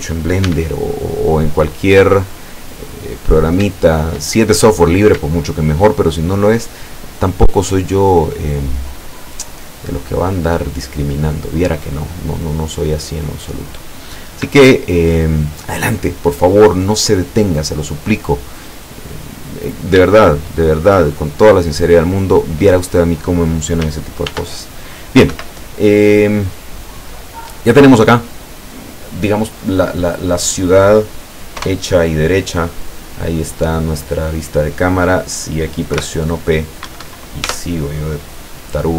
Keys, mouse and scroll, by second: 0.5 e, 2.3-3.8 drag, 4.7-6.0 middle drag, 6.7 click, 8.1-12.0 middle drag, 12.2-12.5 scroll up 1, 12.8 scroll down 1, 13.3 middle click, 14.6-17.8 shift+drag, 18.0-18.4 scroll up 2, 18.7-19.1 scroll up 2, 19.1 click, 20.1 shift+click, 21.1 right click, 21.9 right click, 24.3 ctrl+r, 25.4 Escape, 26.0-26.6 scroll down 4, 27.0-30.8 middle drag, 31.7 KP_0, 33.7-34.1 scroll up 2, 34.1-36.0 middle drag, 36.0 p, 36.9 Escape, 37.5 Tab.